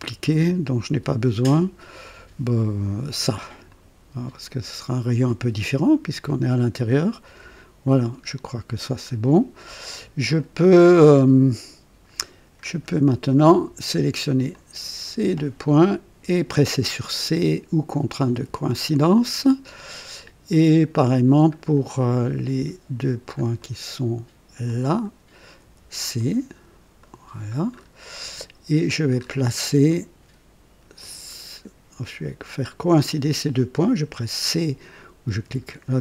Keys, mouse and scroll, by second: 3.7 click, 7.2 Delete, 8.4-9.2 scroll down 2, 9.6 right click, 10.4 right click, 12.6 scroll down 1, 13.1-13.9 right drag, 14.5-15.5 drag, 18.4 c, 19.1-20.4 right drag, 21.5-21.8 scroll down 1, 22.1-22.8 right drag, 23.1 scroll down 1, 23.6-24.3 right drag, 24.7-25.3 drag, 25.6 c, 26.2-26.8 right drag, 27.0 right click, 27.8-28.1 scroll up 1, 28.3 right click, 29.2 scroll up 1, 31.0 click, 31.2 typing, 32.9 click, 35.4 typing.